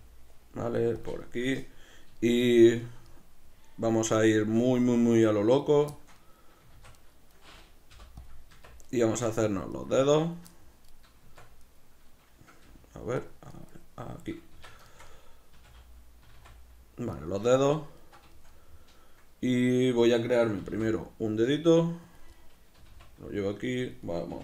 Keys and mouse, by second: 1.1 click, 1.2-5.6 shift+middle drag, 5.6 right click, 5.9-7.1 shift+middle drag, 6.7 shift+d, 7.1 right click, 7.9 p, 8.9 right click, 9.1 Tab, 9.7-11.3 right drag, 11.3 Tab, 11.6-12.7 right drag, 12.7 g, 13.3 right click, 14.5 Tab, 14.8-17.2 shift+middle drag, 15.5 a, 17.2 right click, 17.5-22.2 shift+middle drag, 20.6 s, 22.2 click, 22.3-23.9 middle drag, 22.8 g, 23.9 click, 24.1-24.4 middle drag, 24.3 g.